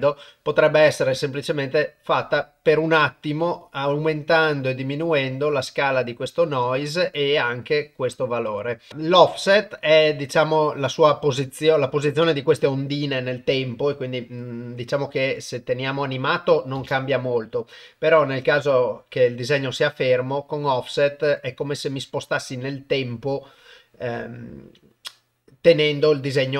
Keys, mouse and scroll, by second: 1.0-6.9 drag, 9.7-11.3 drag, 13.5 click, 16.8 shift+space, 19.9-25.7 drag.